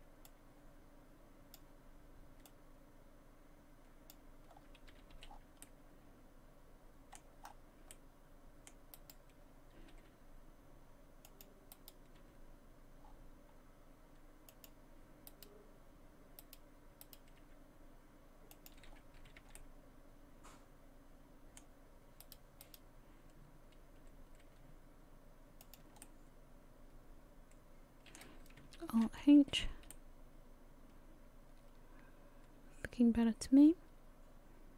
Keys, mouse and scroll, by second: 0.3 click, 2.5 click, 4.5-4.9 scroll down 3, 4.9 a, 5.2 a, 5.3 scroll down 2, 5.6 middle click, 7.4 scroll up 5, 7.9 middle click, 9.0 right click, 9.9 g, 11.7 right click, 12.2 g, 15.3 right click, 16.4 right click, 17.0 right click, 17.5 g, 18.9 scroll down 4, 19.2 a, 19.4 a, 19.6 middle click, 22.2 right click, 22.7 right click, 24.4 g, 26.0 middle click, 28.9 alt+h, 29.5 a, 29.8 a, 29.9 middle click, 34.4 middle click.